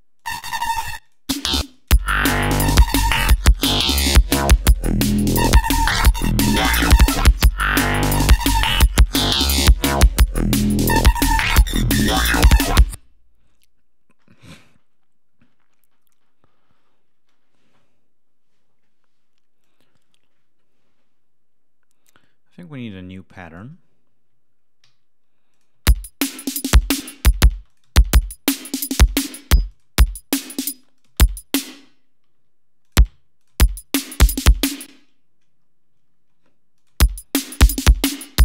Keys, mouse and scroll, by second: 0.6 click, 0.9 click, 1.4 space, 1.6 click, 7.7 ctrl+scroll down 2, 8.5 ctrl+g, 8.8 ctrl+scroll up 2, 10.5 scroll up 2, 11.6-12.2 scroll down 4, 12.5 ctrl+scroll up 2, 13.3 space, 15.8-16.1 scroll up 2, 19.5 click, 19.9 scroll down 2, 21.8 scroll down 2, 24.7 alt+d, 25.4 click, 25.6 space, 26.1-27.5 ctrl+scroll up 7, 27.5 space, 27.6 click, 29.4 space, 29.6 click, 30.6 space, 30.8 click, 31.6 space, 31.6-32.1 scroll up 2, 32.2 ctrl+d, 32.7 ctrl+click, 33.3 ctrl+click, 33.4 space, 34.7 space, 35.5-36.2 scroll down 4, 36.6 ctrl+click, 36.8 space, 37.1 scroll down 2, 38.0-38.4 scroll down 9.